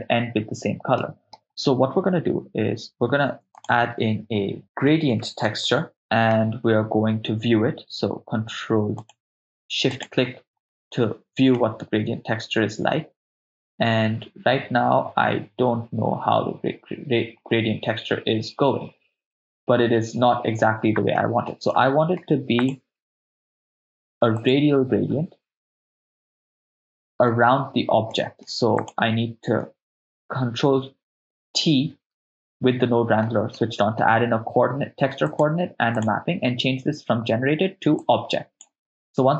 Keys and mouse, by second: 1.0 middle click, 3.3 shift+a, 6.0 middle click, 9.0 ctrl+click, 10.1-10.4 ctrl+shift+drag, 11.6-20.3 middle drag, 21.2 middle click, 21.7 ctrl+middle click, 22.6-24.7 drag, 26.8-27.5 middle drag, 28.1 middle click, 28.8 click, 32.0 ctrl+t, 32.5 middle click, 34.0 ctrl+middle click, 35.3 click, 36.0-36.5 drag, 38.0 click, 38.6-39.3 drag.